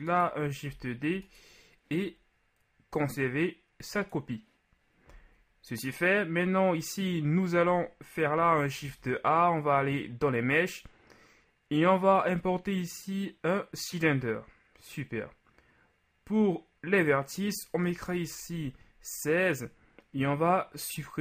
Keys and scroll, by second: 0.7 shift+d, 8.8 shift+a, 18.0 KP_6.